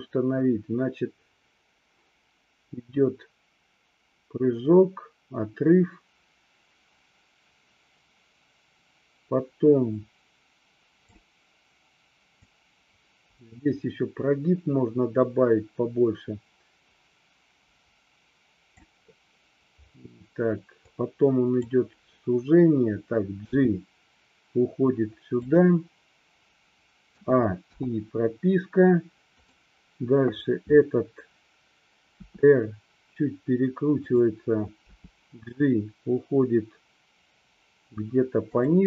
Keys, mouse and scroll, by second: 12.6-18.8 drag, 21.0-21.8 drag, 23.6 g, 25.6 drag, 27.2 a, 27.8 i, 29.5 click, 32.3 r, 34.1 click, 35.0 g, 38.6 click.